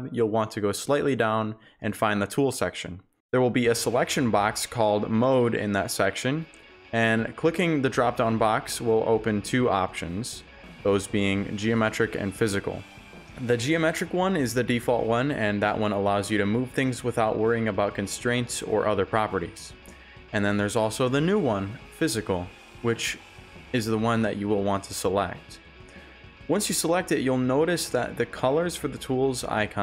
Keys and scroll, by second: 0.0-0.1 typing, 2.7-3.9 typing, 8.2 shift+a, 24.4 shift+d, 26.3 s.